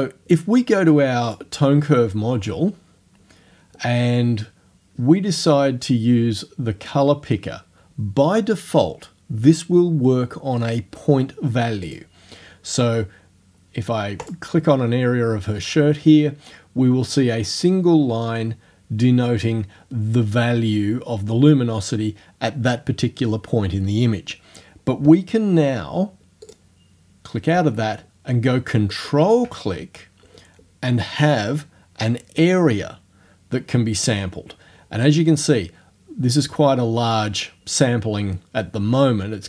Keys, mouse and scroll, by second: 1.3 click, 11.9 click, 14.3 click, 26.5 click, 28.1 ctrl+click, 28.9 ctrl+click.